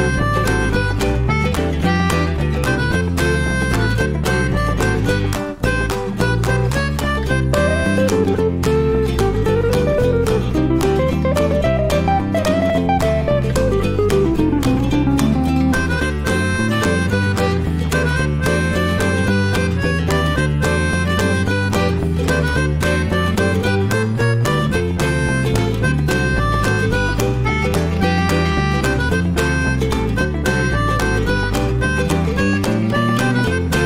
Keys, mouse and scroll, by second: 1.0 shift+middle drag, 1.3-1.6 shift+scroll up 1, 1.6 click, 4.5-5.7 ctrl+shift+right drag, 5.7-7.7 drag, 7.7 ctrl+shift+x.